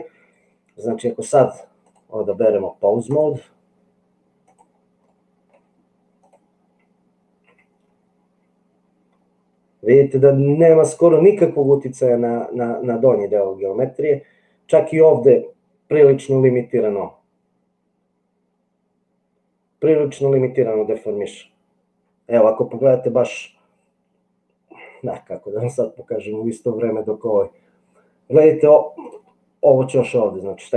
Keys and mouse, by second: 3.2-4.8 drag, 5.3 middle click, 7.6 g, 16.2 g.